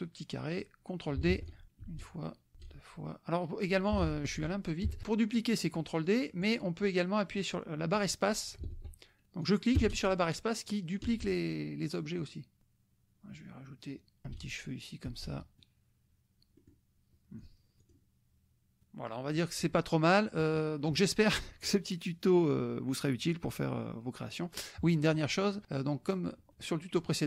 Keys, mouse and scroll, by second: 1.3 ctrl+d, 1.6-4.1 ctrl+drag, 2.0 space, 2.6 space, 4.0 ctrl+z, 5.0-6.6 drag, 7.4-8.7 drag, 8.7 ctrl+z, 9.4-15.8 drag, 9.8 space, 11.2 space, 12.6 space, 14.2 space, 15.1 space, 16.6 click, 17.4 click, 18.0 click, 20.6 click, 25.0 click, 25.6-26.7 drag.